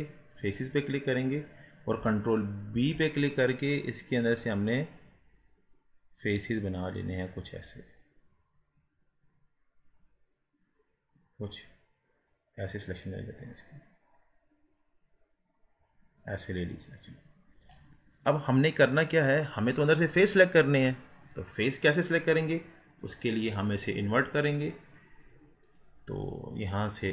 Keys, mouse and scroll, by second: 0.5-2.7 drag, 2.7 ctrl+b, 16.7-17.1 scroll up 1, 17.1 middle click, 17.9-20.7 scroll up 2, 20.7 scroll up 1, 22.4-25.5 middle drag, 25.7-27.1 drag.